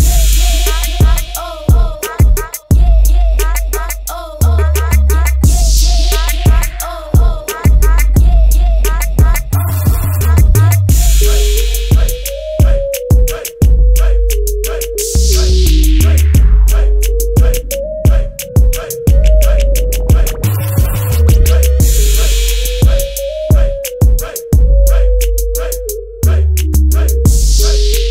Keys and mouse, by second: 14.0 middle click, 14.3 middle click, 14.7 middle click, 16.6 middle click, 21.1-28.1 drag.